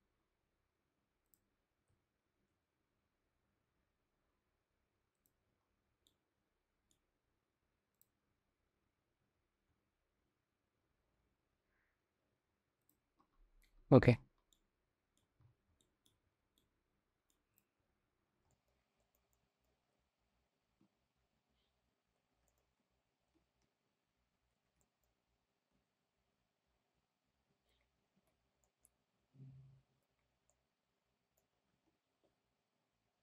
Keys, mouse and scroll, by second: 0.8 click, 1.5 g, 5.7-6.5 middle drag, 7.5 click, 8.8 g, 14.1-14.7 drag, 15.4 shift+middle drag, 16.2-16.9 middle drag, 18.1-18.4 shift+middle drag, 18.8 shift+middle click, 19.1 middle drag, 20.1 s, 22.3 shift+middle click, 22.6 s, 23.2 ctrl+z, 23.4 s, 24.6 shift+middle click, 25.5 g, 28.0 ctrl+z, 28.4 drag, 28.9 g, 30.3 click, 31.5 s.